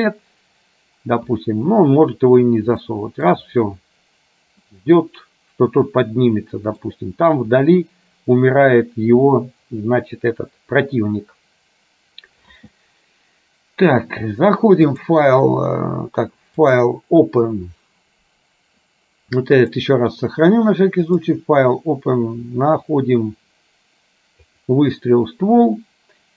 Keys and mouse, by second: 2.9 middle click, 4.8-6.9 middle drag, 15.1-16.1 drag, 16.8-20.0 drag, 21.1-24.9 drag.